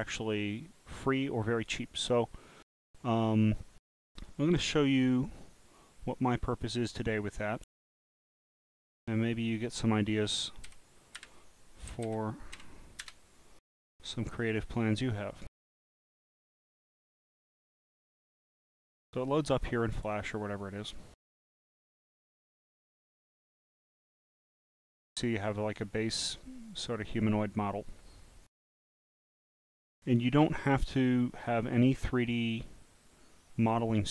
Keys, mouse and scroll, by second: 5.7 click, 8.0-8.9 typing, 10.7 f, 11.9 r, 12.5 e, 15.6 click, 24.1 click, 25.8 scroll up 1, 26.2-27.9 drag, 28.9-29.5 scroll down 8, 30.8-33.8 drag.